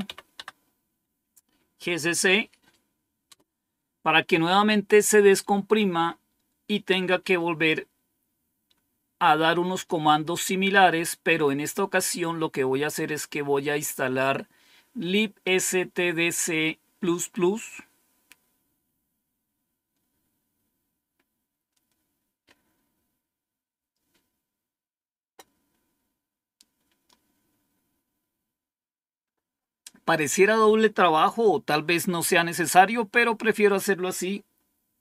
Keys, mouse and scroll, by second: 0.0-0.5 typing, 3.2 Return.